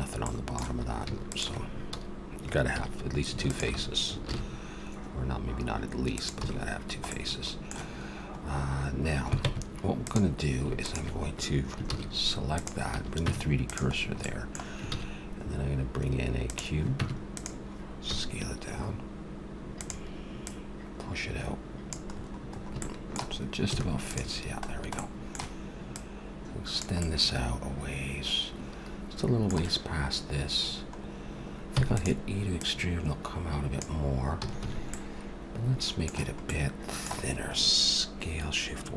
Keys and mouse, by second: 1.3-3.2 drag, 2.8 a, 3.4-5.3 drag, 4.2 ctrl+b, 6.3 a, 6.5 middle click, 9.4 ctrl+Tab, 11.9 shift+s, 12.9 a, 13.2 Tab, 13.9 middle click, 14.9 shift+a, 16.9 Tab, 18.1 s, 22.1 middle click, 23.7 a, 24.1-25.3 drag, 27.0 click, 27.7-28.9 middle drag, 29.1 middle click, 29.3 middle click, 31.7 e, 32.6-34.9 drag, 34.4 a, 34.6 a, 34.9 middle click, 35.3 middle click.